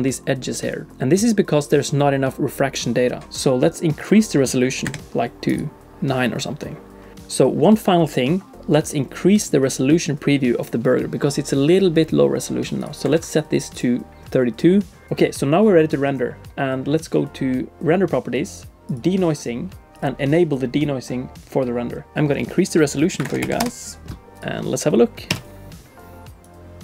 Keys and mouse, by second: 4.0-5.6 drag, 12.8-13.9 drag, 18.9 click, 20.3-22.1 drag, 22.1-24.1 drag, 25.7 F12.